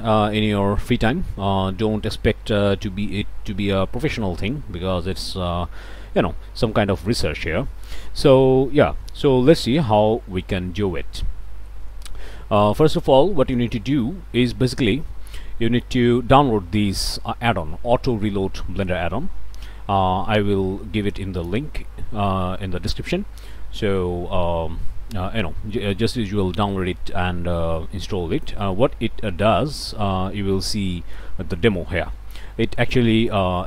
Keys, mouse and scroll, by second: 0.8 click, 1.1 click, 1.9 F12, 2.5 click, 3.0 Right, 3.2 Right, 3.5 Right, 3.8 Right, 4.0 Right, 4.3 Right, 4.7 Right, 5.0 Right, 5.2 Right, 6.4 click, 7.8 click, 8.2 click, 8.5 scroll down 1, 8.5 scroll up 1, 9.3 middle click, 9.4 scroll up 1, 9.5 shift+middle click, 9.7-10.0 scroll down 2, 9.8 middle click, 10.0 middle click, 10.2 middle click, 10.5 middle click, 10.7 middle click, 10.8 scroll down 1, 11.0 middle click, 11.1 scroll up 1, 11.1 middle click, 11.3 0, 11.3-12.6 drag, 14.4 middle click, 14.4-14.8 scroll up 1, 29.2 middle click, 29.2-29.8 scroll up 2, 29.6 middle click, 32.6 middle click, 32.6-33.3 scroll up 1, 33.3-33.6 drag.